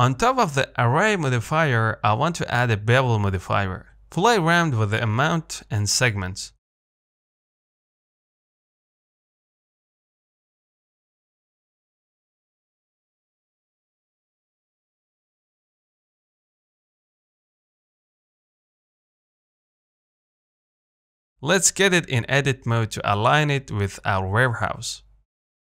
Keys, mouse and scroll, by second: 2.6 click, 2.9-3.5 scroll up 2, 3.9-8.3 shift+drag, 8.3 middle click, 8.7 scroll up 1, 8.9-9.2 scroll down 1, 9.2 middle click, 9.8-10.6 scroll up 1, 10.6-12.1 middle drag, 12.1 scroll up 1, 12.4-17.0 middle drag, 17.0 click, 17.9 middle click, 18.6-18.9 scroll up 1, 18.9-21.5 middle drag, 21.5 Tab, 21.8 a, 22.2 s, 23.8 o, 24.5 s.